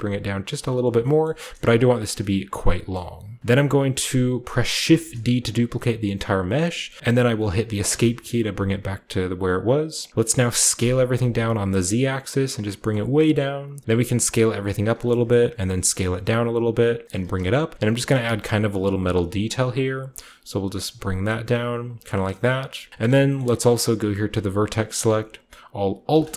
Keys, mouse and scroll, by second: 0.5 click, 0.7 middle click, 0.7 scroll down 1, 1.1 middle click, 1.3 typing, 1.8 click, 2.0 scroll down 1, 2.8-4.1 scroll up 1, 3.0 click, 3.0-5.0 middle drag, 3.6 typing, 4.1-5.0 scroll down 1, 4.9 typing, 7.8 Escape, 10.7-11.1 typing, 12.6 click, 12.8-13.8 scroll up 1, 13.8 s, 14.8 shift+click, 15.0 shift+middle click, 15.2-16.8 shift+scroll up 1, 15.3-15.6 typing, 16.8-17.5 typing, 17.0 scroll down 1, 17.2-18.4 drag, 18.2-21.3 shift+middle drag, 18.3-21.3 shift+scroll up 1, 19.0 typing, 21.7 click, 22.0 scroll down 1, 22.2 middle click, 22.2 scroll up 1, 22.4-22.9 scroll down 1, 22.9-24.0 scroll up 1, 24.0-24.5 scroll up 1, 24.5 click.